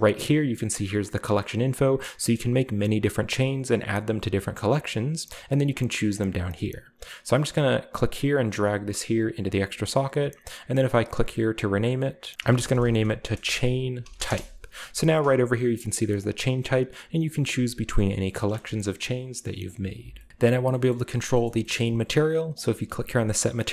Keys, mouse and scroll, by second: 4.6 click, 5.5 click, 6.5 click, 8.1-10.1 drag, 10.8-12.4 drag, 12.4-14.1 typing, 14.2 Return, 16.2 click, 17.9 click, 18.6-19.6 shift+middle drag, 18.9-19.6 shift+scroll down 2, 19.6 middle click, 20.4-21.8 scroll down 1, 21.8-22.5 scroll up 1, 22.5-23.4 drag.